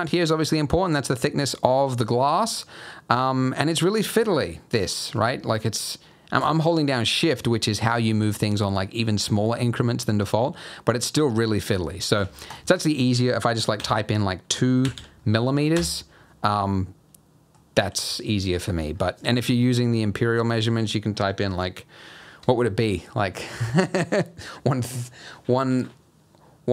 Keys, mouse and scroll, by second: 12.5 click, 14.9 m, 16.7 middle click, 18.5 middle click.